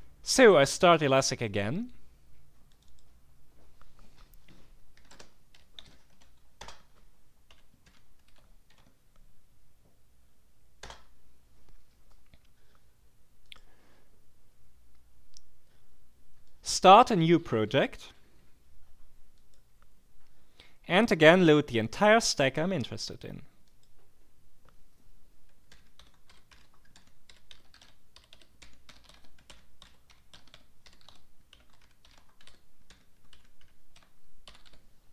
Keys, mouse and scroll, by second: 5.0-9.2 typing, 6.6 Return, 10.8 Return, 13.4 click, 16.4 click, 19.3 click, 23.7 click, 25.5-35.1 typing.